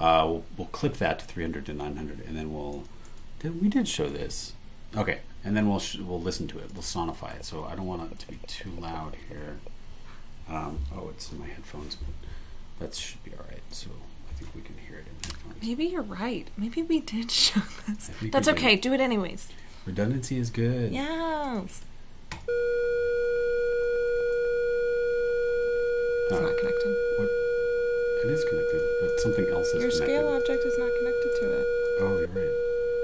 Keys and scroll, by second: 3.0 super+e, 21.7 super+e, 29.7 BackSpace, 31.3 super+e, 32.2 super+BackSpace.